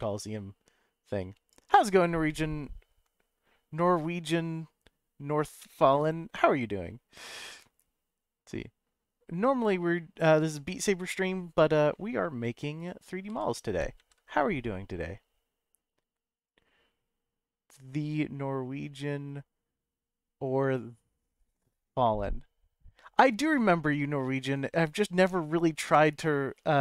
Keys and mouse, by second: 13.3 g, 14.0 shift+z, 16.3 click.